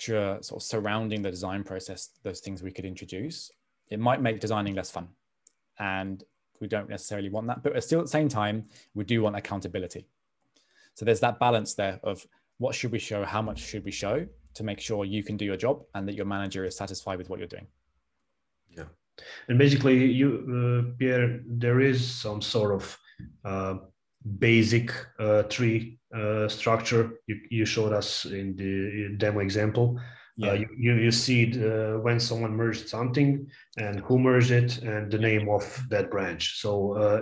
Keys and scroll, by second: 23.8 super+Tab, 24.7 a, 28.6 super+Tab.